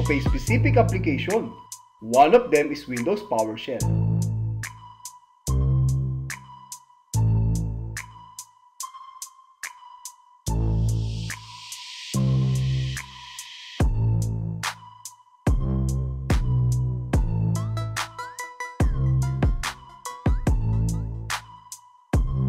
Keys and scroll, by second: 3.9 super+r, 9.1 Return, 11.7 Return, 13.7 Down, 17.0 Return, 19.0 alt+e, 21.1 Tab.